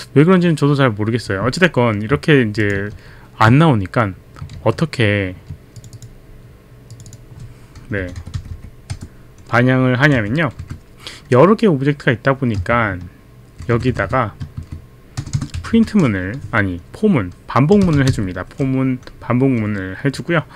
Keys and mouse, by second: 2.6 click, 3.0 ctrl+z, 3.0 click, 3.5 click, 4.6 ctrl+z, 5.8 click, 6.9 click, 7.1 click, 8.0 Delete, 8.0 click, 8.2 Delete, 8.5 Delete, 9.0 BackSpace, 10.2 Right, 10.6 Down, 12.7 shift+click, 13.8 shift+Left, 14.6 Down, 14.6 shift+Left, 15.2 Return, 15.5 Up, 15.5 Return, 15.8 Up, 15.8 Return, 17.5-18.4 typing.